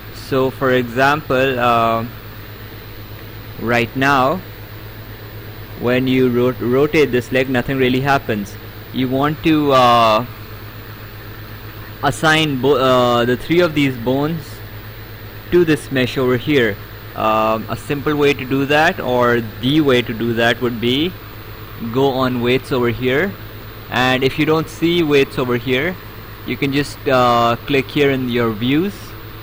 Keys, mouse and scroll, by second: 4.6 Escape, 5.4 click, 8.9 ctrl+z, 12.6 click, 13.6 click, 20.3 Escape, 23.2 click.